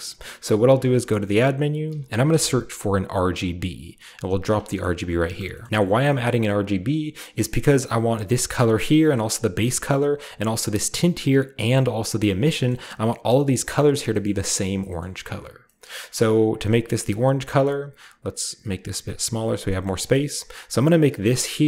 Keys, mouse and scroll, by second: 0.7 typing, 1.4-4.4 shift+drag, 1.8-2.3 typing, 4.5-5.7 drag, 4.8-5.7 scroll up 1, 5.7-6.8 scroll down 1, 6.8-7.5 scroll down 1, 7.5-8.3 scroll up 1, 8.3-9.4 scroll up 1, 8.6-9.3 middle drag, 9.9-11.3 middle drag, 9.9-10.7 scroll up 1, 10.7-11.3 scroll up 1, 11.9-14.1 drag, 12.4-14.1 scroll down 1, 14.1-14.5 scroll up 1, 14.2 middle click, 14.5-14.8 drag, 15.0-15.6 scroll up 4, 16.6 scroll up 2, 17.2-18.6 scroll up 2, 18.6 click, 19.0 click, 19.8-20.9 scroll down 1, 20.1-21.6 middle drag, 20.9-21.6 scroll down 1.